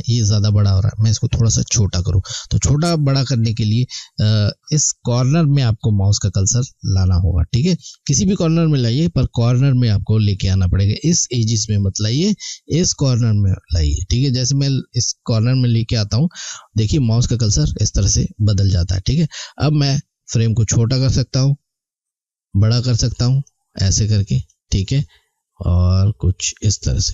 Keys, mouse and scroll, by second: 19.0 click.